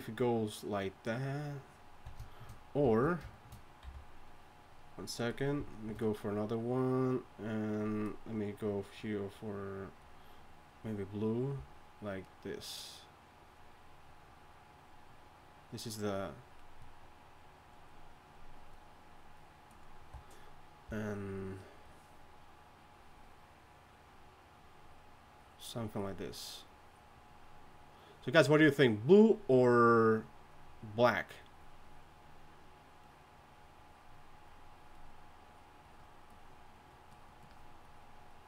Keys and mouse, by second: 2.8 d, 3.8 n, 11.6-38.4 typing.